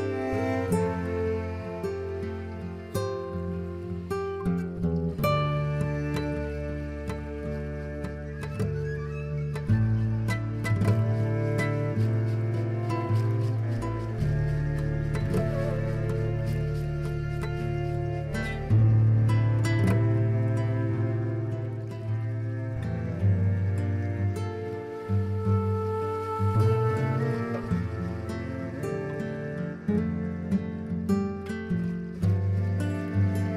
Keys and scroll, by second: 0.7-4.8 typing, 9.5 z, 19.5 e, 23.0 d.